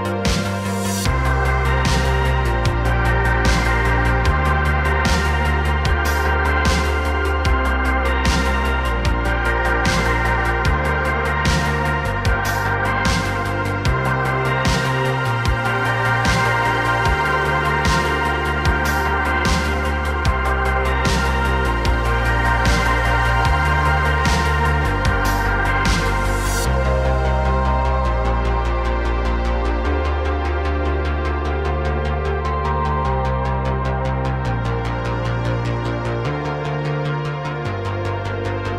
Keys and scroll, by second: 3.2 s, 4.3 ., 5.3 s, 6.2 space, 9.8 s, 12.6 s, 22.3 x, 23.8 x, 24.6 a, 25.2 KP_Decimal, 30.0 s, 34.7 s, 36.3 s.